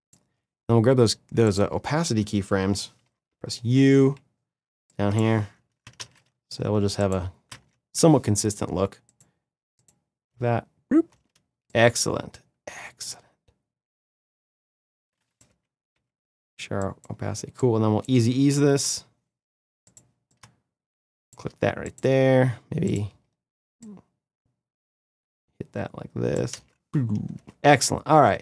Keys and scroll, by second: 2.8 u, 5.7 ctrl+c, 10.0 space, 15.2 u, 18.5 F9, 26.2 space.